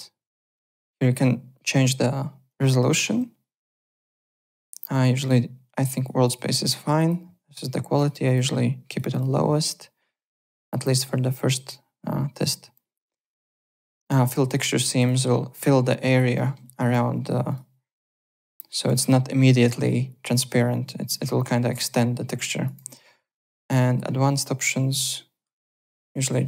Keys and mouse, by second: 4.1 click, 5.9 click, 7.0 click, 7.9 click, 8.9 click, 14.3 click, 15.0 click, 16.3 alt+middle click, 17.5 click, 18.3 alt+middle click, 18.6 alt+right click, 22.6 ctrl+e, 23.7 click, 25.0 click, 26.1 click.